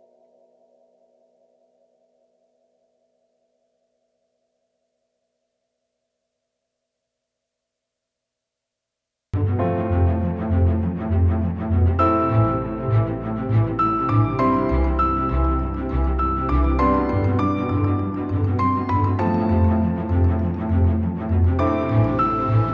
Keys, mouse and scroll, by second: 0.7 alt+right click, 1.4 alt+right click, 3.0 alt+right click, 3.9 alt+right click, 4.3 alt+right click, 4.6 alt+right click, 5.5 alt+right click, 9.9 alt+right click, 10.2 alt+right click, 11.0 alt+right click, 13.1 alt+right click, 13.3 alt+right click.